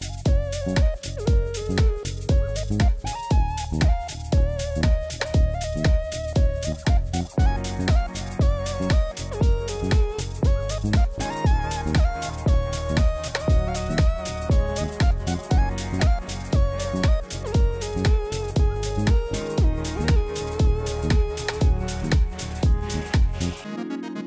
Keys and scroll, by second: 6.2 Tab, 11.0 Tab, 22.0 Tab, 22.9 shift+Tab.